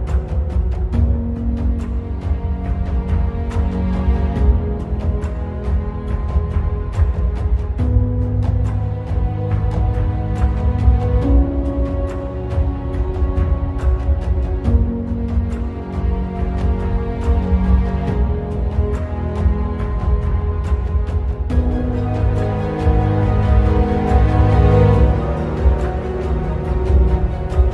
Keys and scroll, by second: 0.6 Return, 10.7 ctrl+alt+t.